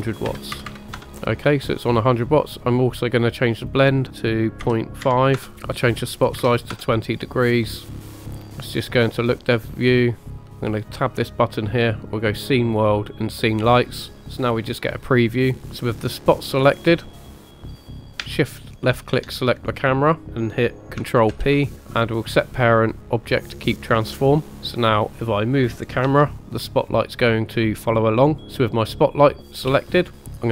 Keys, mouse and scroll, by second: 0.7 KP_0, 3.5-5.4 drag, 5.5-6.7 drag, 8.0 click, 10.7-13.6 drag, 15.8 click, 17.2 click, 17.2 middle click, 17.4-17.7 scroll down 3, 17.7 scroll up 2, 18.0 click, 18.8 shift+click, 21.3 ctrl+p, 24.8 click, 26.1 g, 28.4 right click, 28.4 click, 29.4 middle click, 29.7-30.5 scroll down 2.